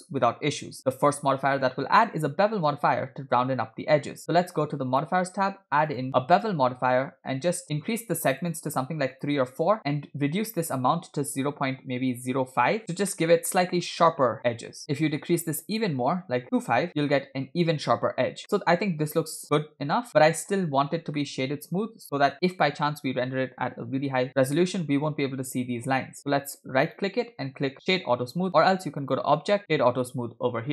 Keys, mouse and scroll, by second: 0.8-1.8 middle drag, 2.3 scroll up 1, 5.0 click, 6.5-7.6 drag, 8.3 click, 9.4-10.6 drag, 10.8-12.8 drag, 11.7 0, 13.2-14.0 middle drag, 14.8 click, 18.4-20.7 middle drag, 20.7-21.1 scroll up 2, 21.2-22.3 shift+middle drag, 26.9-28.5 right drag, 29.1 click.